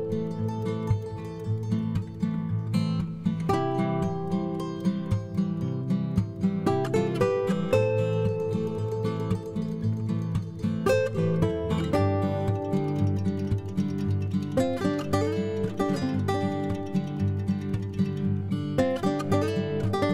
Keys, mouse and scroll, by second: 0.2 m, 13.5-14.9 drag, 18.9 F2.